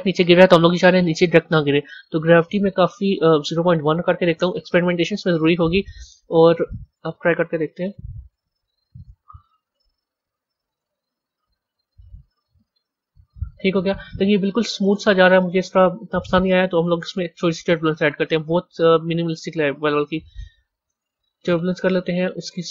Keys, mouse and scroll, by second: 1.2 scroll down 7, 1.7-2.3 scroll down 2, 2.3-5.3 drag, 6.1-7.3 drag, 7.3-8.0 middle drag, 8.0-8.4 scroll down 2, 8.4-10.6 middle drag, 10.6-13.5 drag, 14.5-17.1 drag, 17.1 shift+a.